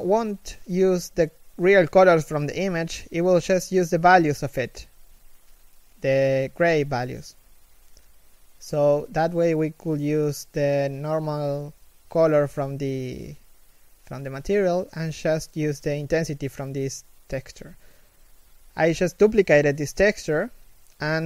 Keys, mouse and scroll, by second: 5.6 shift+middle click.